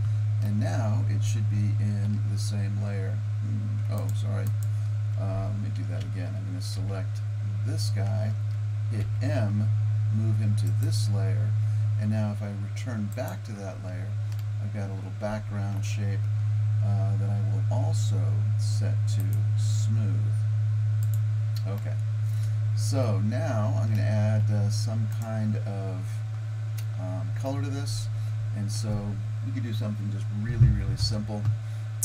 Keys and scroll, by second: 6.1 Tab, 6.8 Tab, 9.0 m.